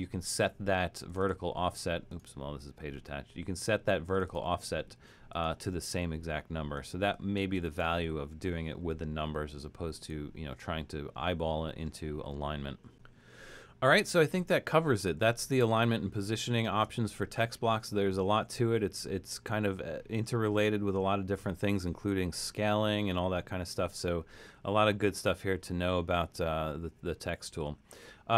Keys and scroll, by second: 7.7 shift+Return, 15.1 super+-, 15.7 super+-, 16.7 super+-.